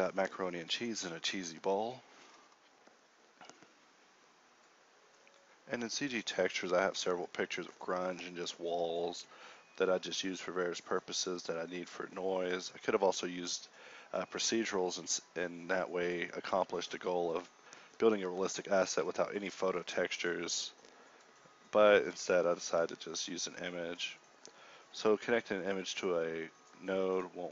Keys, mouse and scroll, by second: 9.2 KP_Divide, 11.9 g, 12.1 g, 12.7 g, 12.9 a, 14.0 b, 14.5 ctrl+g, 14.9 Tab, 17.7 g, 17.9 g, 18.2 shift+a, 23.1 shift+a, 26.8 x, 26.9 shift+a.